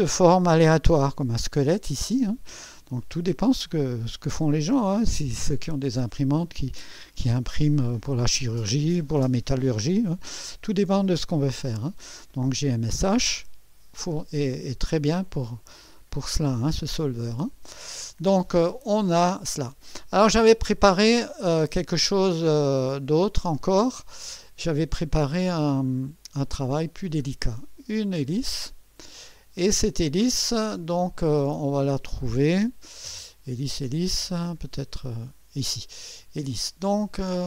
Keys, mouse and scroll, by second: 1.9 scroll up 1, 17.4 click, 21.4 click, 21.6 space, 23.6 click, 23.8 space, 26.0 click, 26.9 scroll down 2, 27.9-29.5 drag, 34.9 click, 36.6-37.3 scroll down 2.